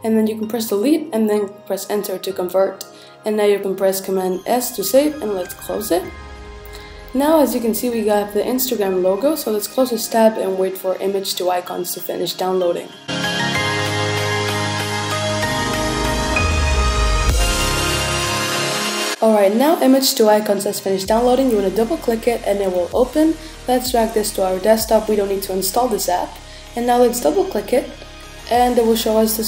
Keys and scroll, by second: 0.7 Return, 3.3 super+s.